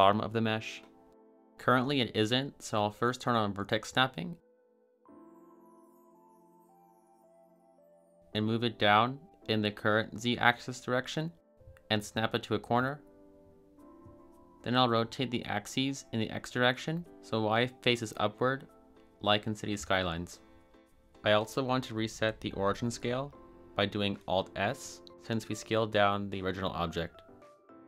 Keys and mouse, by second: 1.1 a, 1.3 a, 2.2 click, 4.2 click, 4.6 click, 8.6 g, 10.1 z, 11.7-13.1 drag, 17.7 r, 18.1 x, 19.0 9, 19.3 0, 19.9 Return, 24.5 alt+s.